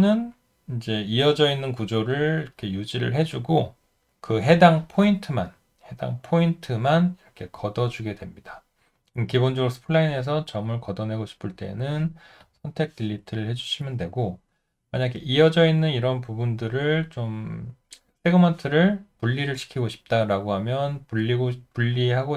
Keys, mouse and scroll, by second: 4.0 Delete, 12.4 Delete.